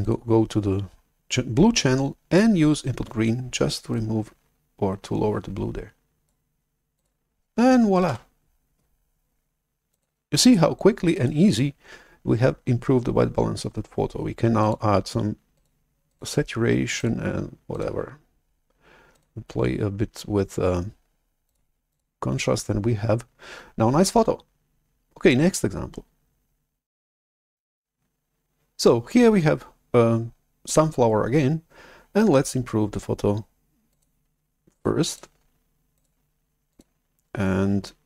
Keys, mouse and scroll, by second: 0.0-2.5 drag, 3.9-6.2 drag, 6.9 click, 8.2 shift+super+F11, 9.8 click, 10.3 click, 11.0 click, 11.4 click, 15.4 click, 16.0 click, 16.9 click, 17.6 click, 19.0 click, 21.3 click, 21.8 click, 34.6 click, 35.1-35.5 drag, 35.9 click, 36.6 click.